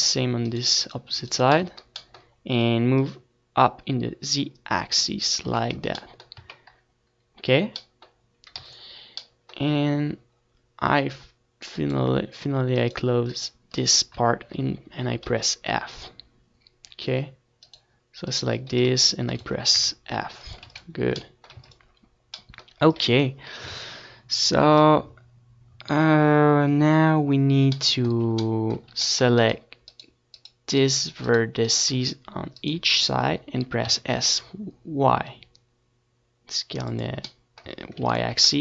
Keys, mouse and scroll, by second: 0.2 Tab, 0.4 middle click, 1.0 Tab, 2.4 a, 3.4 ctrl+s, 6.8-8.2 middle drag, 8.2-10.9 right drag, 10.6 f, 12.0-13.0 middle drag, 13.0-16.4 right drag, 14.5 s, 15.1 s, 16.4-18.2 middle drag, 16.5 ctrl+s, 16.9 Tab, 16.9 click, 16.9-18.2 right drag, 17.4 ctrl+s, 18.9 ctrl+s, 24.1-26.0 middle drag, 24.4 Tab, 25.3 a, 26.0-28.7 drag, 28.7-31.9 right drag, 30.9 s, 34.4 click, 35.0 Tab, 35.0 click, 35.2 ctrl+s, 36.7 ctrl+s, 37.7 Tab.